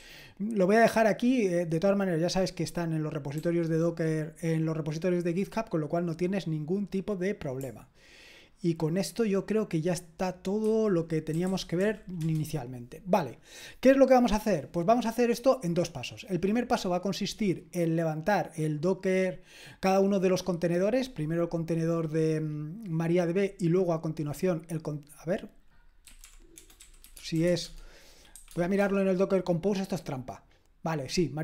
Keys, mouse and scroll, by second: 3.4 ctrl+d, 11.1-12.3 typing, 26.0-29.3 typing.